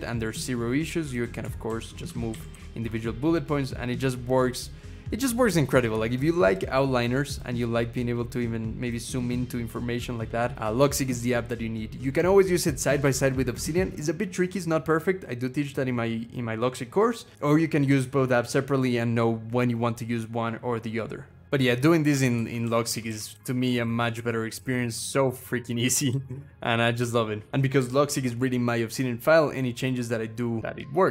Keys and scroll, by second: 1.5 alt+shift+Down, 1.8 alt+shift+Down, 2.1 alt+shift+Up, 2.3 alt+shift+Up, 5.5-7.2 scroll down 1, 7.8-8.8 scroll up 1, 11.2-13.2 scroll down 1, 22.2 alt+shift+Down, 22.4 alt+shift+Down, 22.7 alt+shift+Up, 22.9 alt+shift+Up, 23.1 alt+shift+Down, 23.4 alt+shift+Down, 23.6 alt+shift+Down, 23.9 alt+shift+Up, 24.6 Up, 24.8 Up, 25.0 Up, 25.6 Down, 25.9 alt+shift+Up, 26.1 alt+shift+Up, 26.8 alt+shift+Down, 30.3-31.1 typing.